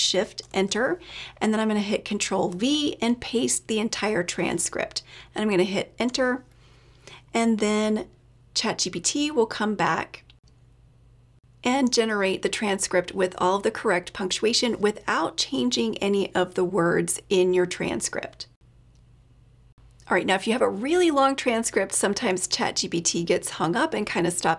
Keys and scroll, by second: 0.4 shift+Return, 2.5 ctrl+v, 5.8 Return.